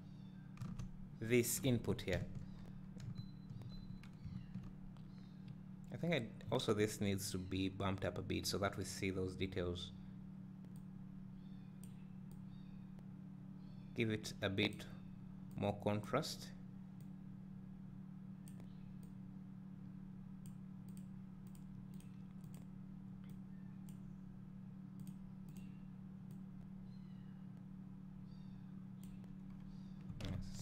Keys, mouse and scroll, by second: 0.0 ctrl+shift+click, 2.1 `, 2.5-3.0 scroll up 2, 3.0 `, 11.9-21.5 drag, 22.0 click, 25.1-26.5 drag, 29.5 scroll down 1.